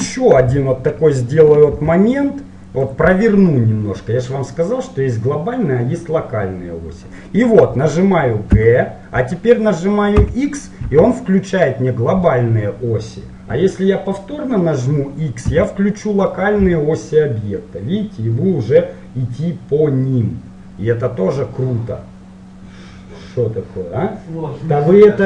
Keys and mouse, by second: 1.9 r, 8.5 g.